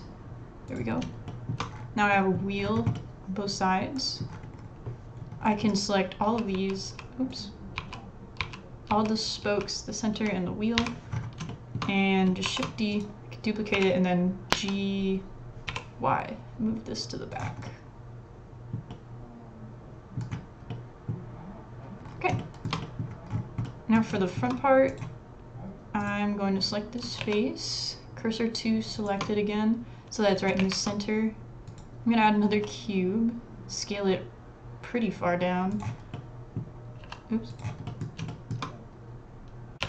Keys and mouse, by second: 2.1 middle click, 2.9-4.2 middle drag, 3.7 s, 5.5 middle click, 6.3-10.8 typing, 7.3 click, 12.5 shift+d, 13.7 g, 15.9 typing, 17.6-18.4 middle drag, 19.0-20.1 middle drag, 20.7 middle click, 22.4 shift+middle click, 22.8 middle click, 23.6 middle click, 24.3 shift+middle click, 24.3 shift+click, 24.9 click, 27.2 shift+s, 30.6 shift+a, 32.5 s, 36.1 middle click, 37.0 s, 37.8 middle click, 38.3 shift+middle click, 39.7 g.